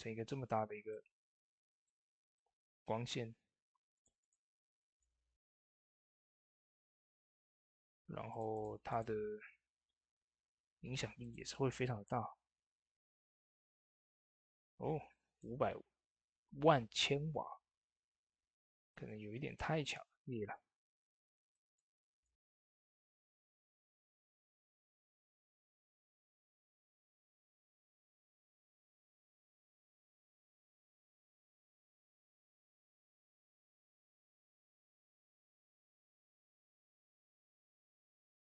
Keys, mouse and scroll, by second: 2.2-3.8 middle drag, 3.8 click, 7.0-10.9 drag, 11.0-17.7 drag, 18.4 click, 21.3 click, 21.4 click, 26.0 click, 31.9 click, 33.4 typing, 34.9 click.